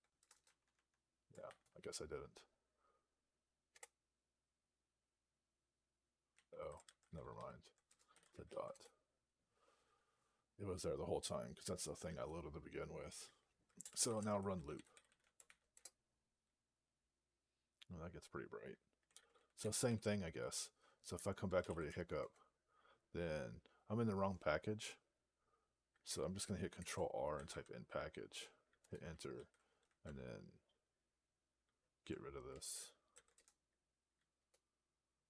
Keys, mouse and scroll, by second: 0.0 BackSpace, 0.2 BackSpace, 0.3 Tab, 1.3 ), 3.6 Return, 6.2 q, 6.7 alt+p, 7.2 alt+b, 8.0 ., 8.3 ctrl+e, 8.6 Return, 13.5-15.8 typing, 21.2-22.0 typing, 22.0 Return, 27.8 n, 29.7 ctrl+e, 30.4 alt+b, 33.0 alt+d, 33.7 BackSpace, 34.8 Return.